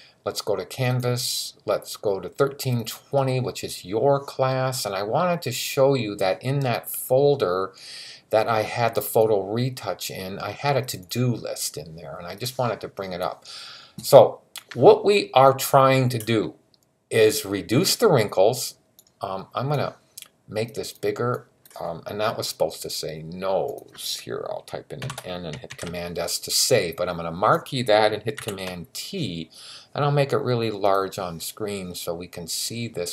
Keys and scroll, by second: 24.8 n, 25.5 super+s, 28.2 super+t.